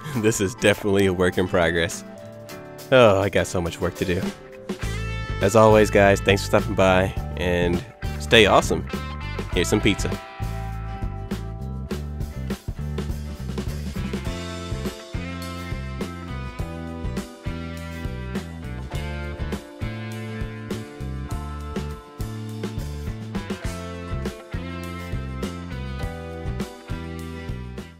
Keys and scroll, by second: 0.2 ctrl+x, 0.4 ctrl+shift+v, 1.4 ctrl+x, 2.0 ctrl+shift+v, 2.0 ctrl+shift+a, 2.5 ctrl+b, 2.6 ctrl+shift+a, 2.8 ctrl+space, 2.9 ctrl+z, 3.0 ctrl+shift+a, 3.3 ctrl+space.